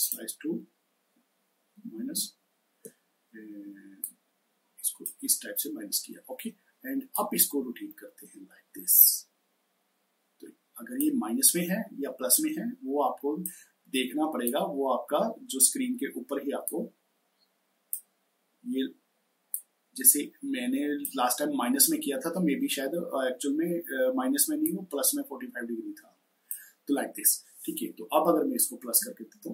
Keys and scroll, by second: 1.5 ctrl+-, 1.7 ctrl+-, 1.9 ctrl+-.